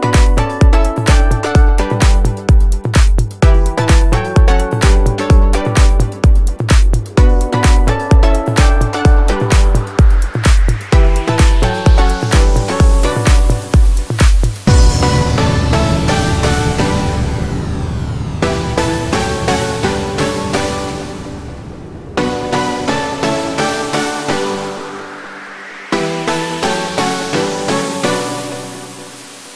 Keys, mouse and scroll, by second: 29.3 double click.